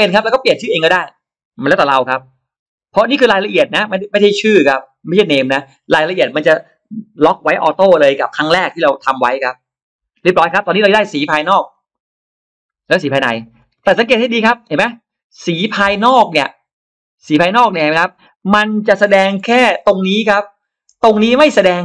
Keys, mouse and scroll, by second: 11.6 click, 12.9 click, 13.4-13.7 scroll down 1, 13.6 middle click, 14.1-15.1 scroll up 2, 14.5 click, 14.5 space, 15.8 click, 18.3 middle click, 19.2 shift+x, 19.7 click, 20.8 click.